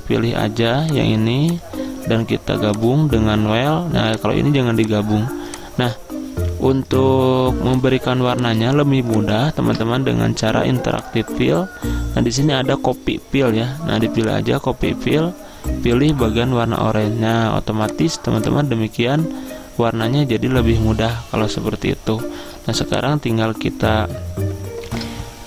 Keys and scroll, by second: 9.7 ctrl+z.